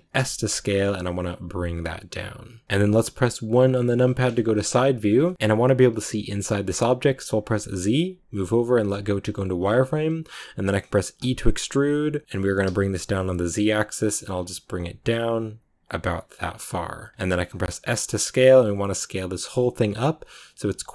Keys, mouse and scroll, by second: 2.6-3.1 scroll up 3, 3.9 KP_1, 5.0 scroll down 1, 5.1-8.9 shift+middle drag, 8.9 z.